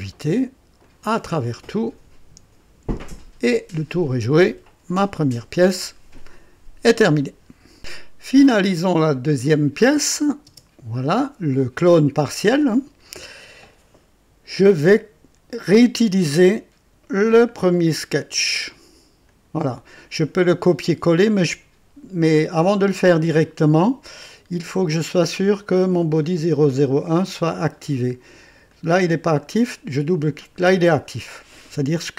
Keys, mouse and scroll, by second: 0.8 click, 1.6 click, 3.1 click, 4.0-5.6 drag, 6.9 right click, 7.7 click, 10.4 space, 19.2 click, 24.2 click, 26.2 click, 28.6 click, 29.6 click.